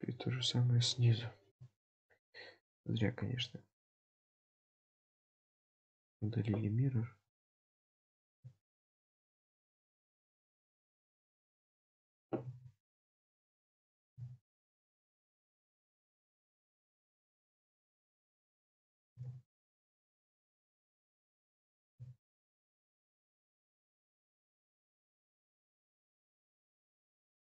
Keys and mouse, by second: 3.4-5.2 middle drag, 16.6-17.6 middle drag, 20.3 click, 21.5 click, 23.1 middle click, 24.4 Tab, 25.1-27.5 middle drag.